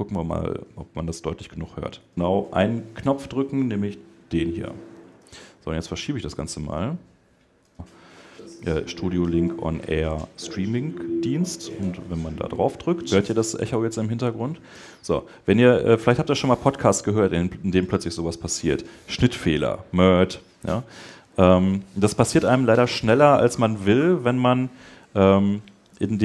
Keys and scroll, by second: 21.9 Escape.